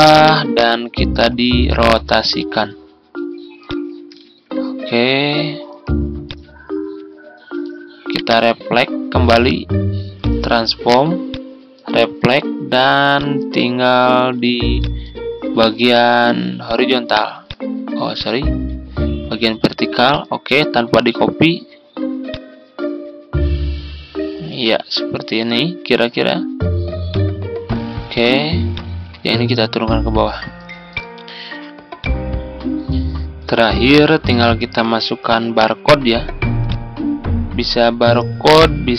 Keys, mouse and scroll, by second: 1.3-3.5 ctrl+scroll up 1, 3.5-5.6 drag, 6.1 click, 8.0 right click, 10.0-30.7 drag.